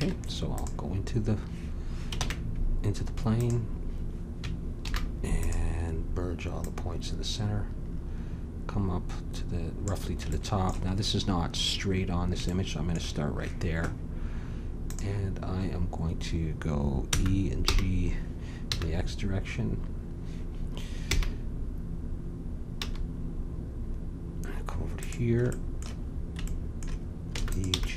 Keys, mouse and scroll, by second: 2.1 ctrl+Tab, 4.8 alt+m, 8.2-9.5 drag, 10.3-14.1 middle drag, 14.8-16.7 drag, 17.0 e, 25.5 middle click, 27.4 e, 27.7 g.